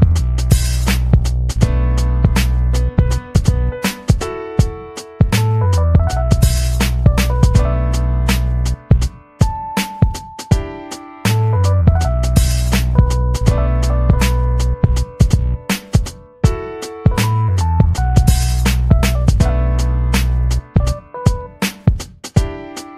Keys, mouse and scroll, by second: 0.0 middle click, 1.0 middle click, 1.4 ctrl+scroll up 2, 1.6 ctrl+middle click, 2.8 click, 3.2 click, 4.1 click, 4.7 click, 5.0 click, 5.6 click, 6.5 click, 7.1 click, 7.7 ctrl+scroll down 2, 8.0 ctrl+middle click, 8.5-8.8 ctrl+scroll down 2, 10.3 ctrl+scroll down 2, 11.0 click, 12.3 click, 12.8 ctrl+c, 13.4 click, 16.3 ctrl+scroll up 2, 17.4 click, 17.7 click, 18.0 click, 18.6 ctrl+scroll down 2, 19.0 click, 19.3 click, 20.1 ctrl+v, 20.8 ctrl+middle click, 21.2-21.7 ctrl+scroll up 5, 22.3 scroll up 2.